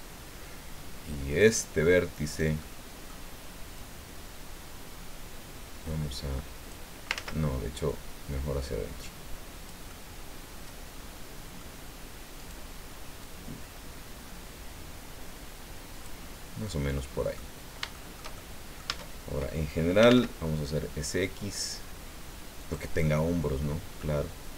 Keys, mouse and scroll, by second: 1.3 click, 2.2 right click, 2.6 middle click, 3.7-6.9 drag, 7.1 ctrl+z, 7.9-9.8 drag, 9.9-11.8 middle drag, 12.4 right click, 13.2-16.2 drag, 16.3 scroll down 1, 16.6 middle click, 17.7 scroll down 2, 17.9 shift+click, 17.9-19.0 shift+middle drag, 18.9 Tab, 19.8-20.6 typing, 22.6 click, 23.0 click.